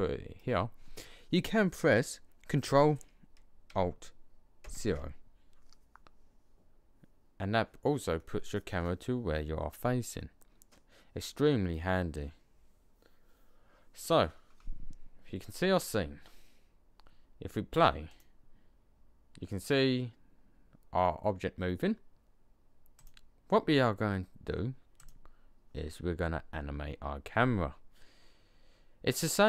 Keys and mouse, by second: 4.5 ctrl+alt+KP_0, 18.0 click, 22.9-24.7 middle drag, 24.9-26.5 middle drag, 27.1-28.4 middle drag.